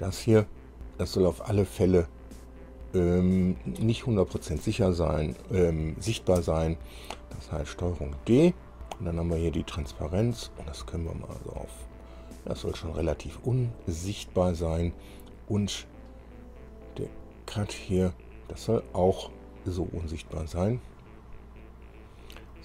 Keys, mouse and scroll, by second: 0.2 click, 6.6 ctrl+d, 10.2-13.8 drag, 17.2 click, 20.5-22.0 drag.